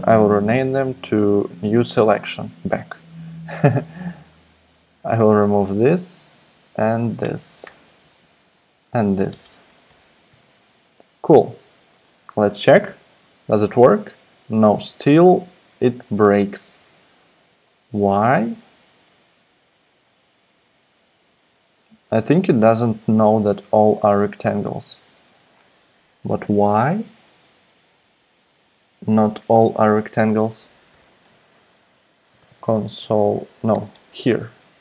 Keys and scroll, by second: 0.6 n, 1.7 Tab, 2.6 Escape, 5.0 BackSpace, 5.3 BackSpace, 5.5 BackSpace, 7.2 BackSpace, 7.5 BackSpace, 7.6 BackSpace, 9.3 BackSpace, 9.9 BackSpace, 10.3 super+s, 11.1 BackSpace, 12.7 alt+super+p, 14.6 super+z, 15.5 super+Tab, 30.9 BackSpace, 31.2 Return, 32.0-34.1 typing.